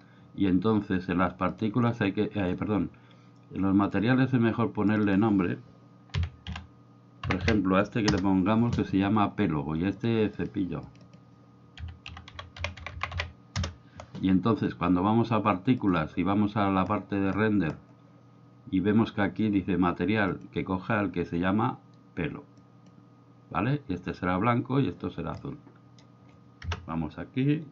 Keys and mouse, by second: 1.5 click, 3.8 click, 4.9-8.8 drag, 9.9 click, 10.9 click, 15.8 click, 20.3-22.9 drag, 25.4-26.1 middle drag, 26.7 KP_0.